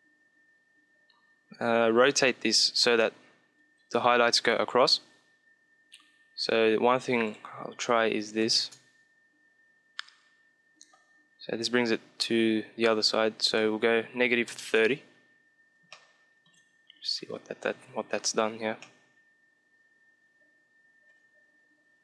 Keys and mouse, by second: 6.8-8.9 drag, 13.0-14.1 drag, 13.9 KP_Subtract, 14.3 KP_3, 14.3 click, 14.3 KP_0, 14.8 KP_Enter, 15.3 shift+middle click, 16.0 click, 17.0 middle click, 17.1 click, 17.2 middle click, 17.6 KP_5, 20.4 middle click.